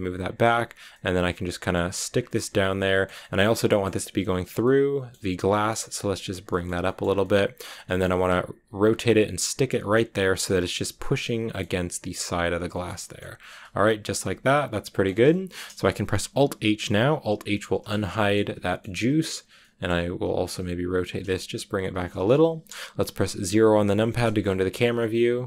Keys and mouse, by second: 0.1 click, 0.5 click, 0.8-1.6 drag, 1.8 g, 2.0 drag, 3.1 shift+middle drag, 3.5 middle click, 3.9 g, 4.3 click, 4.5 middle click, 5.1 g, 5.4 click, 5.6 middle click, 5.8 g, 6.1 click, 6.3 shift+middle drag, 6.7 shift+middle drag, 7.1-7.5 middle drag, 7.7 shift+middle click, 8.6-11.5 typing, 8.9 click, 9.4 click, 9.7 click, 10.0 click, 10.2 click, 10.9 click, 11.1 click, 12.2 click, 12.6 click, 12.9 shift+click, 13.4 g, 13.9 shift+click, 14.1 click, 15.0 g, 15.4 shift+click, 17.7 alt+h, 17.9 click, 18.5 a, 18.6 click, 19.3 click, 19.4 middle click, 20.3 r, 21.0 click, 21.0 g, 21.7 shift+drag, 22.9 a, 24.2 KP_0.